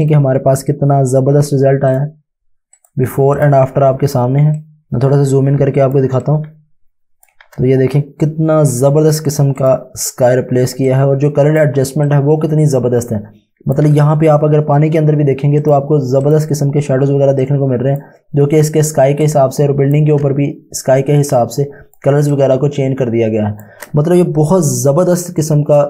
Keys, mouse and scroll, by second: 0.5 space, 1.9 click, 4.6 ctrl+click, 5.2-5.9 typing, 6.3 click, 10.5 space, 10.9 ctrl+click, 12.1 click, 17.1 space, 17.4 click, 17.7 space, 18.9 space, 19.3 click, 19.5 space, 21.2 click, 21.6 space, 22.3 click.